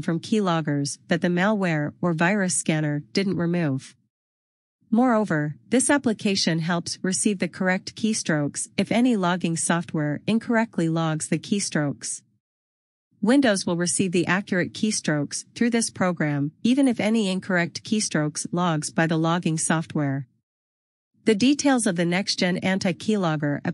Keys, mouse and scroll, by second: 6.9 click, 17.1 click.